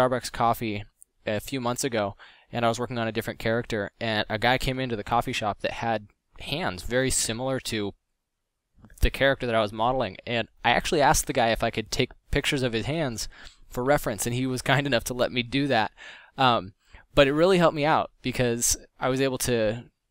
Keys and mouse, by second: 1.9 middle drag, 2.2 f, 2.5 click, 3.4 f, 13.7 f, 16.0-17.3 middle drag.